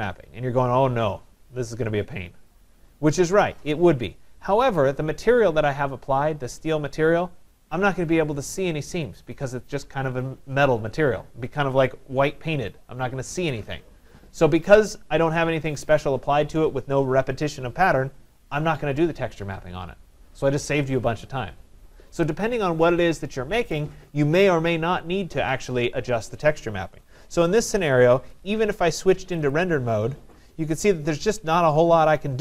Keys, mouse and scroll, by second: 28.5 click, 29.6 click.